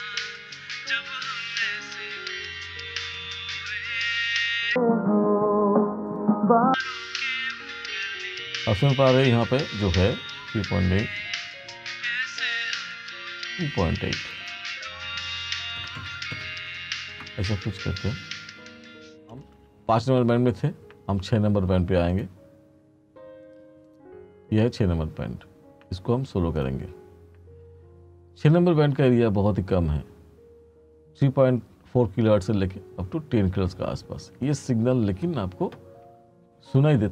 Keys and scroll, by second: 15.6-16.9 typing, 17.2 Return, 19.5 space, 33.2-36.3 typing.